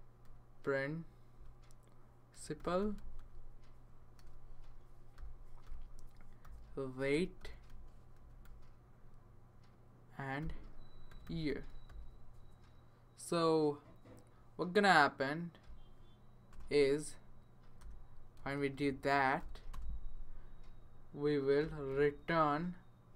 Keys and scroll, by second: 0.0-8.9 typing, 10.4-12.4 typing, 16.5 Return, 17.8 BackSpace, 18.3 space, 19.4-19.7 typing, 21.3-23.1 typing.